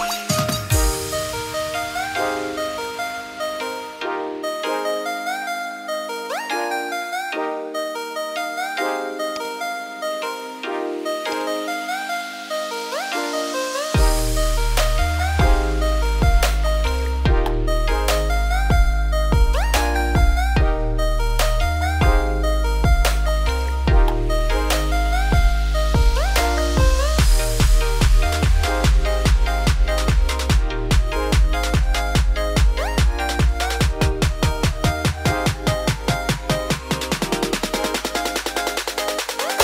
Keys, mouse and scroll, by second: 1.2-3.5 shift+drag, 4.1 scroll up 1, 4.3 Tab, 5.3-6.2 scroll up 16, 6.3 middle click, 6.7-7.1 scroll up 1, 7.1 middle click, 7.4 Tab, 7.8-8.2 scroll up 2, 8.2-9.6 middle drag, 9.6 click, 10.6 click, 11.5-13.1 right drag, 13.1 click, 14.1 `, 14.9-15.2 scroll down 5, 15.3 click, 15.6-16.3 scroll down 3, 16.3-17.1 scroll down 4, 17.1-20.3 scroll down 3, 22.7-25.7 scroll down 1, 29.3 click, 30.0-30.5 scroll up 3, 30.5 shift+middle click, 31.1 scroll up 1, 31.2 Tab, 31.7 click, 31.8 2, 32.0 click, 33.2 click, 34.7 3, 34.9 click, 35.8 shift+s, 36.2 Tab, 36.5 shift+a, 38.6 scroll up 2, 38.7 Tab, 39.3 shift+middle click.